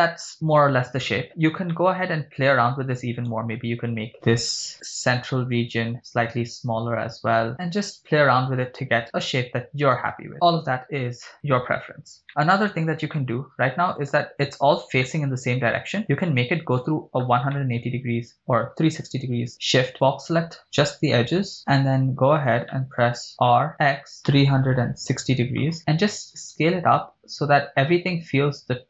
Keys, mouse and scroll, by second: 1.2-1.6 scroll up 4, 1.7 shift+middle click, 3.4 right click, 4.5 b, 6.4 s, 7.3-8.0 scroll down 6, 7.5 click, 8.4 scroll up 3, 8.8 scroll down 2, 9.4-9.7 scroll up 3, 10.3 right click, 12.3 shift+scroll up 3, 12.8 shift+middle click, 13.1-14.1 middle drag, 14.3 middle click, 15.1 middle click, 16.8 KP_1, 17.6 shift+middle click, 17.9 scroll up 2, 19.0 b, 20.6 b, 21.6 scroll down 2, 22.2 scroll down 1, 22.7 shift+middle click, 23.4-25.0 typing, 26.1-27.3 scroll down 4, 27.4 scroll down 1, 28.6-28.8 scroll up 1.